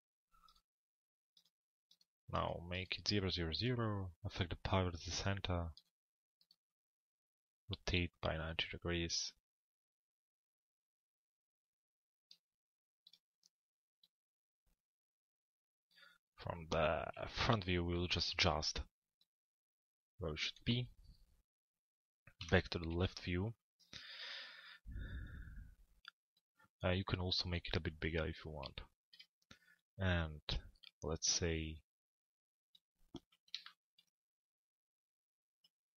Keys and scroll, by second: 16.7 f, 17.4 u, 22.1 l, 22.9 z.